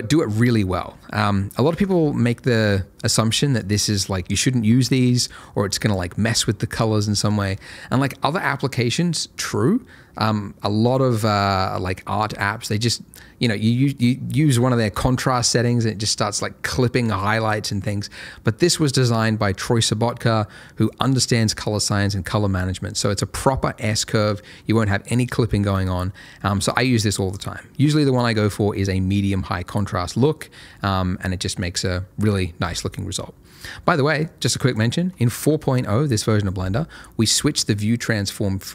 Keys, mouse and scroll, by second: 0.9-1.5 ctrl+scroll up 1, 1.5-1.9 ctrl+scroll down 1, 3.6 click, 27.5 ctrl+scroll up 1, 28.4 click, 30.9-31.5 scroll up 1, 31.5-34.1 scroll down 1, 34.1 click, 38.0 click.